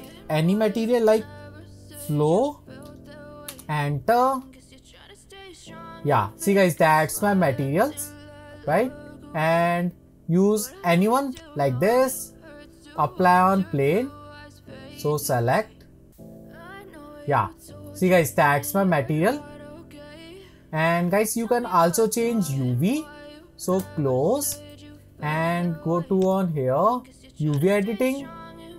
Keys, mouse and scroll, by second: 1.9 o, 16.6 click, 18.7-20.0 scroll down 7, 20.0-21.4 scroll up 5, 26.3 click.